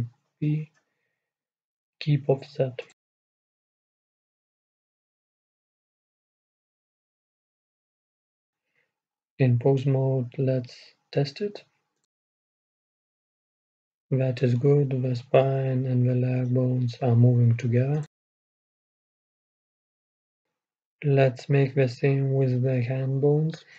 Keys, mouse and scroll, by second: 1.8 ctrl+p, 5.0 middle click, 5.2-7.2 middle drag, 7.2 Tab, 7.9-10.0 right drag, 9.9-11.9 drag, 10.2 right click, 13.8-15.7 drag, 21.5-23.7 right drag.